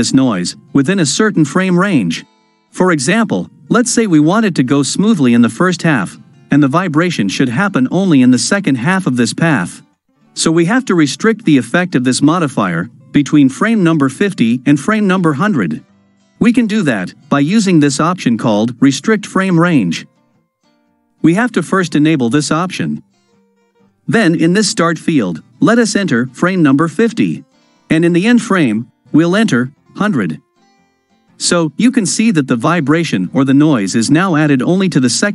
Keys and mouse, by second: 29.4 KP_0.